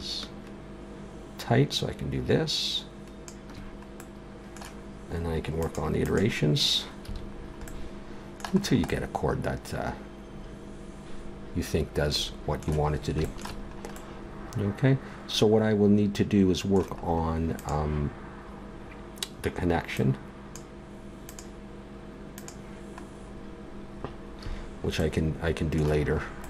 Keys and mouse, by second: 4.0-5.6 middle drag, 5.6-7.9 drag, 7.1 a, 7.9 middle click, 17.6-19.4 right drag, 19.9-24.0 right drag, 24.0-25.0 middle drag, 24.5 a.